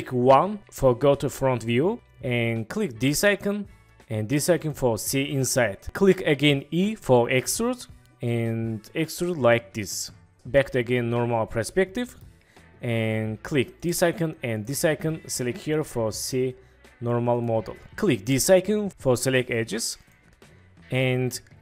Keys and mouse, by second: 0.3 KP_1, 3.3-4.5 drag, 4.5 middle click, 6.8 e, 10.6-12.2 middle drag, 13.8 middle click, 14.6-15.9 middle drag, 17.4-17.8 middle drag, 20.1-21.6 middle drag.